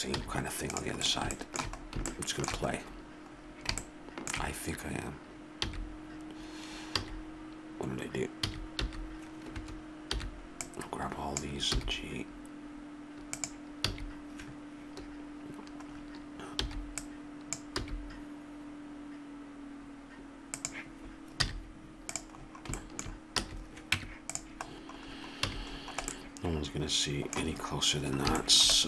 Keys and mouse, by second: 0.2 z, 1.8 click, 5.7 b, 10.1 b, 11.8 g, 13.9 a, 16.6 b, 17.8 g, 22.1 z, 22.4-23.4 middle drag, 23.4 a, 23.9 Tab, 24.5-25.5 right drag, 25.5 a.